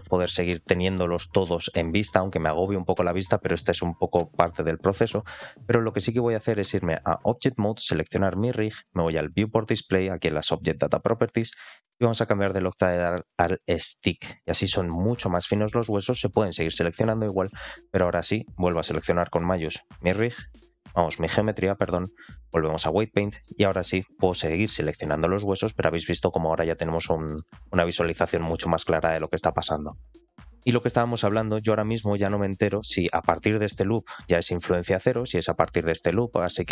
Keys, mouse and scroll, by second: 7.6 click, 11.9-13.8 drag, 19.1 shift+click, 21.6-22.8 drag, 23.4 middle click, 24.5 ctrl+click, 25.6 ctrl+click, 26.4 ctrl+click, 27.2-29.1 middle drag, 30.4 shift+middle click, 31.2 alt+middle click, 31.5-32.0 scroll up 2, 31.8 middle click, 32.3 alt+shift+middle click, 32.6 middle click, 36.4 middle click.